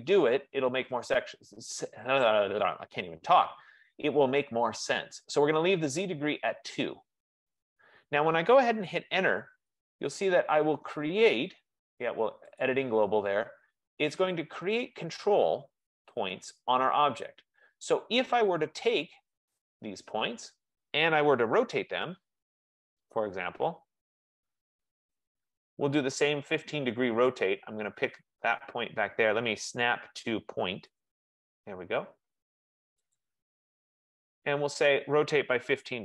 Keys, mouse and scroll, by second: 2.8 F15, 9.6 Return, 12.7-17.5 drag, 19.5 click, 21.9-23.8 typing, 31.1-33.1 drag, 34.3 click, 35.6-36.0 typing.